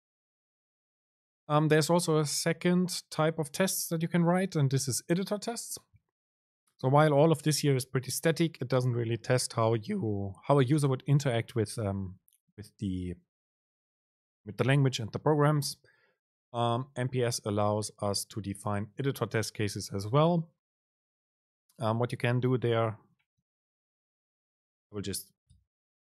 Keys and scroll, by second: 25.7 BackSpace.